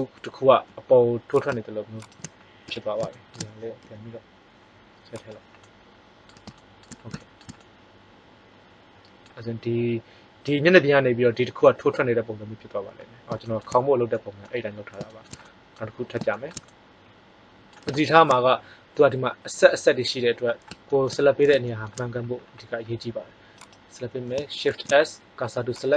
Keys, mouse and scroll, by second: 1.4 right click, 2.6 KP_1, 3.7 g, 5.2 middle click, 14.6-15.9 middle drag, 17.7-19.3 middle drag, 20.3 middle click, 23.5-25.4 right drag, 24.6 shift+s, 25.4 click.